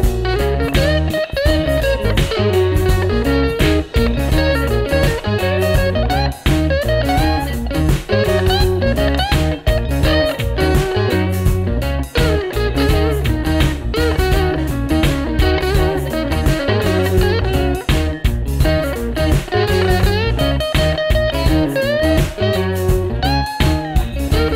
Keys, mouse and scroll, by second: 1.6-2.3 scroll down 1.